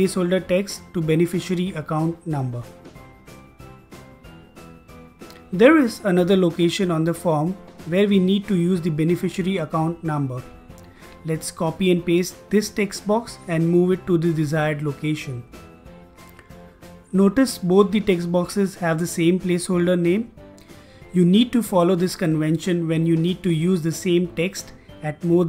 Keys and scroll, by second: 2.2-5.2 typing, 13.1 ctrl+c, 14.0 ctrl+v.